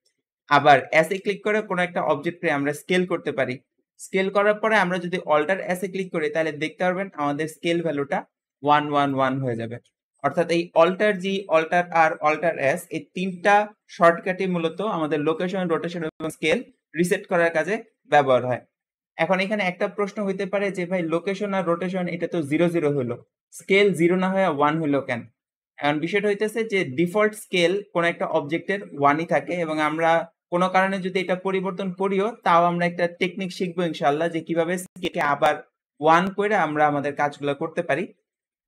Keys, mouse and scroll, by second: 1.0 s, 5.7 alt+s.